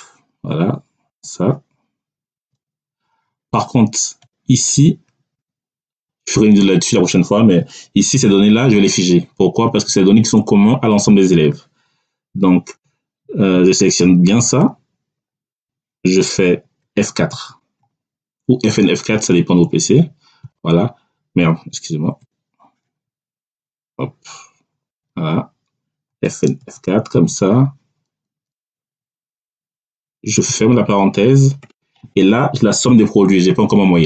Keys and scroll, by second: 2.3 ., 17.2 F4, 20.3 [, 22.0 BackSpace, 26.5 F4, 30.2 [, 31.5 Return.